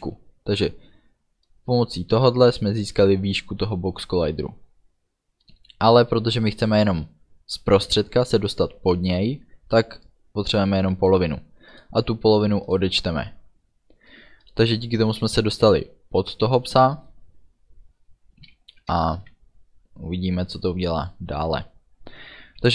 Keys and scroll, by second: 19.0 Return.